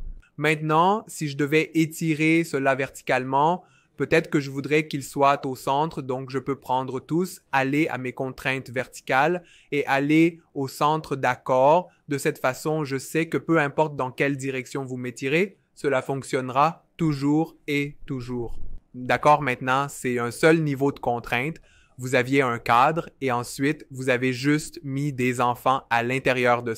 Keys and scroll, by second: 15.4 super+z.